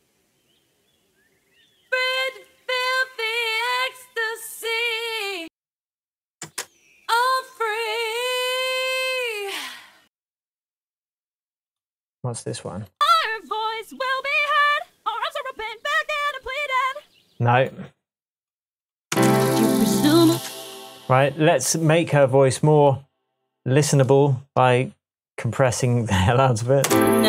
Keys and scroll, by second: 6.4 space, 10.0 space, 19.1 space, 20.3 space, 26.8 space.